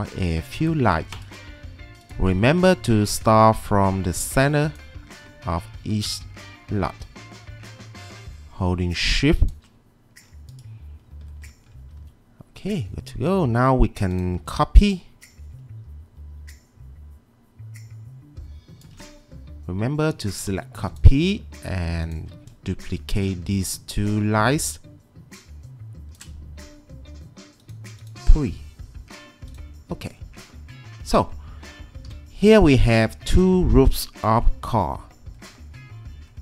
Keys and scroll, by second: 12.0 1, 14.4 w, 32.1 g, 34.8 g.